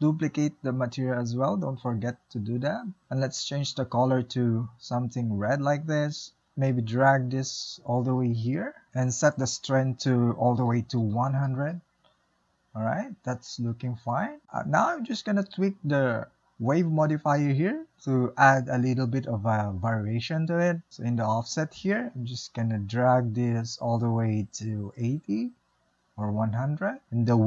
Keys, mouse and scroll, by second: 1.7-4.6 drag, 7.3-9.9 drag, 11.4 KP_0, 12.2-12.9 middle drag, 12.9-13.4 scroll up 2, 13.4-22.0 shift+middle drag, 22.0-27.4 drag.